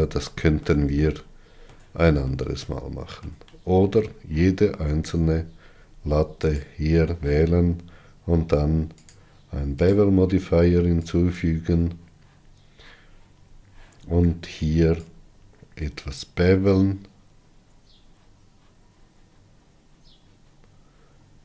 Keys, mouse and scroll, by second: 5.8-6.7 scroll up 6, 6.5 middle click, 7.2 click, 12.0-13.8 drag, 13.8-14.5 scroll up 4, 17.2-18.8 shift+drag.